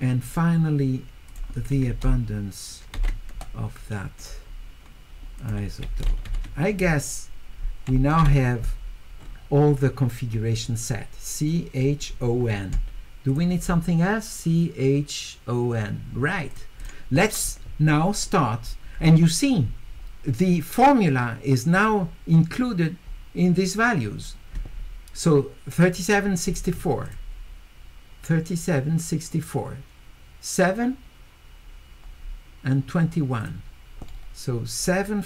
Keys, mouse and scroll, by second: 0.2 click, 1.3 click, 5.4 click, 6.1 q, 9.4-12.0 middle drag, 9.4-11.5 scroll up 2, 11.5-12.2 scroll up 2, 12.1 middle click, 13.3 click, 16.5 click, 18.9 middle click, 18.9 scroll up 2, 27.0 click, 33.4 click, 34.1 middle click.